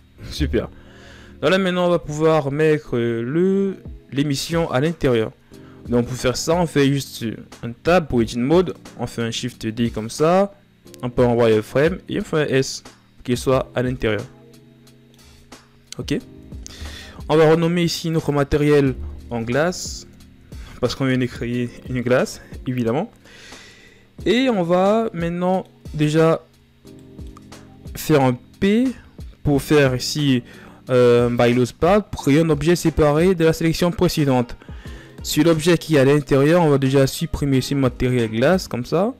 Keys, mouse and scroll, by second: 0.1 KP_1, 1.4 ctrl+scroll up 4, 3.6 scroll down 1, 11.2 scroll up 2, 13.3-14.3 scroll down 1, 28.3 Tab, 31.0 p, 35.3-37.1 scroll up 2, 38.1-39.1 drag.